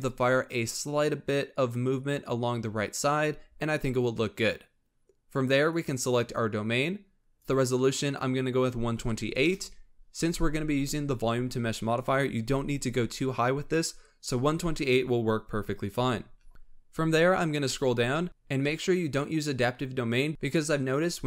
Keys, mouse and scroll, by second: 5.6 click, 7.2-10.4 drag, 16.9-17.6 scroll down 11.